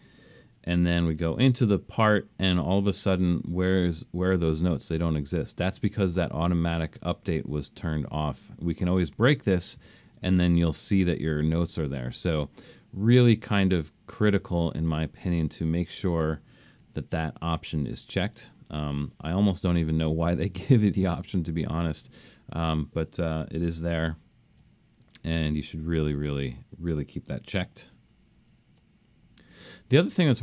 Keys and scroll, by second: 0.9 alt+super+., 14.5 super+z, 16.8 alt+super+a, 24.0 alt+super+/, 26.2 9, 27.5 alt+super+..